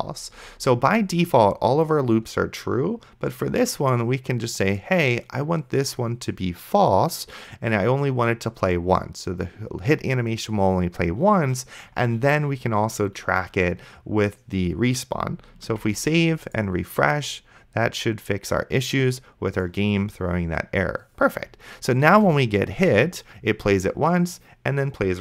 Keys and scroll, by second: 0.0-0.2 typing, 16.0 ctrl+s, 22.4 space.